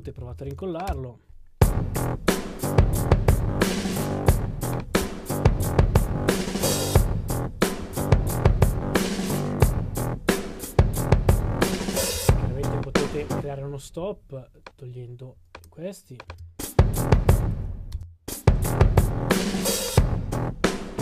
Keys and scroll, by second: 5.0 super+d.